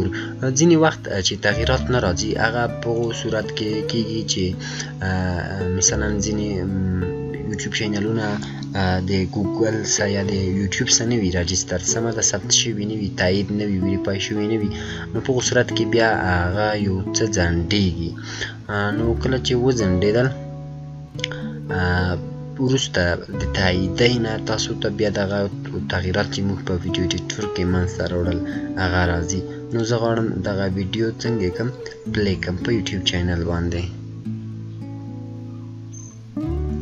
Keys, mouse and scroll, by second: 2.9 click, 2.9 click, 29.6 click.